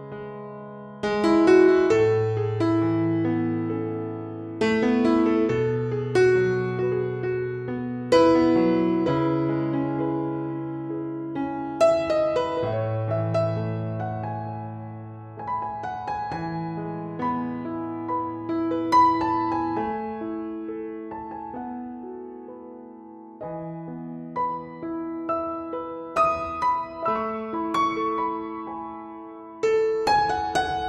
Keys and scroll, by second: 3.5 super+s, 11.9 super+-, 13.4 ], 15.6 Down, 17.6 Down, 18.4 Down, 18.9 Up, 20.7 super+t, 24.1 Return, 24.5 super+0, 28.8 super+-.